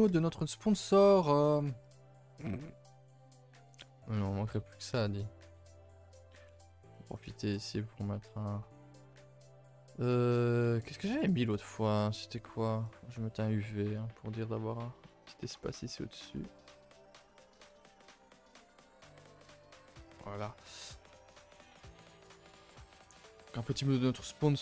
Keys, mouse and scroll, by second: 0.0 t, 0.4 t, 4.8-13.0 drag, 14.1-19.4 drag, 19.5 a, 19.6 a, 20.8 shift+middle click, 21.3-21.8 scroll up 1, 21.8 click, 22.2 shift+middle click, 22.4 scroll up 1, 23.0 s.